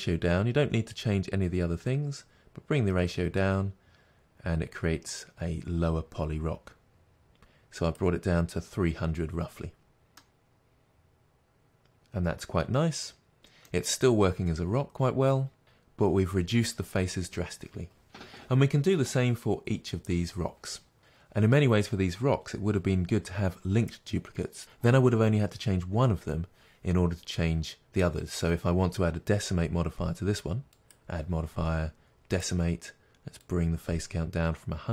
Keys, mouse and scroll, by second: 10.1-14.2 middle drag, 14.2-14.8 scroll down 2, 14.8-20.1 middle drag, 15.6-16.4 scroll up 2, 16.4-18.3 scroll up 1, 18.3-20.1 scroll up 1, 21.0 middle click, 23.8 middle click, 24.6 click, 32.3-34.9 drag.